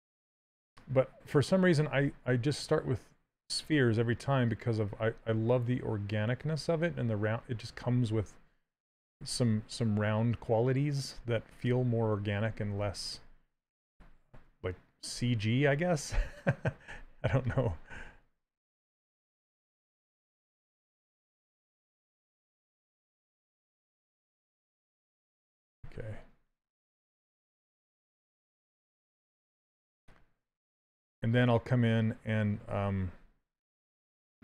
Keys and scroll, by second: 19.2 s, 28.8 s.